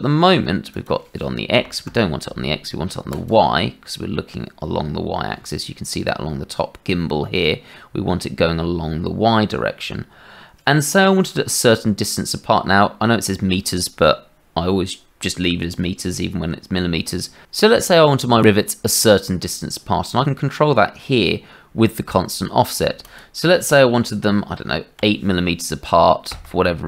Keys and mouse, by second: 0.8-2.5 drag, 3.2-17.4 drag, 23.0 click, 23.5-26.8 right drag.